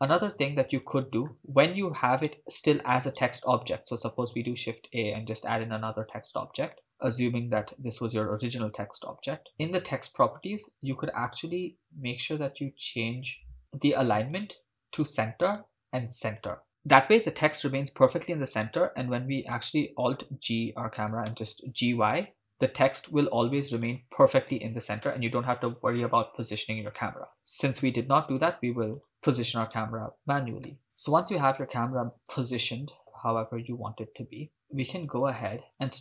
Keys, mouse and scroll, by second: 0.8 shift+click, 2.2 right click, 3.2-3.8 right drag, 4.4 shift+a, 9.5 Return, 9.5 9, 9.5 0, 10.4 click, 12.7-14.3 scroll down 8, 14.3-15.1 drag, 15.5-16.5 drag, 18.6 right click, 20.1 alt+g, 21.2 g, 21.3 y, 23.9 click, 27.3 right click, 28.4 x, 29.8 click, 29.8 right click, 30.7 g, 30.8 shift+click, 32.1 g, 32.3 y, 33.6 click.